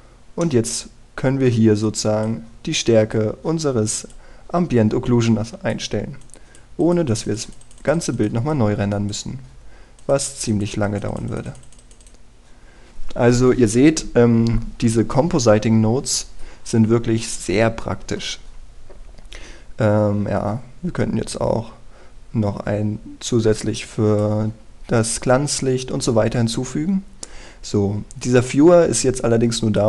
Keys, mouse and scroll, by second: 1.1 middle click, 2.5-25.1 drag, 27.5-28.2 scroll down 1, 28.2-29.2 scroll up 1, 29.2-29.8 drag.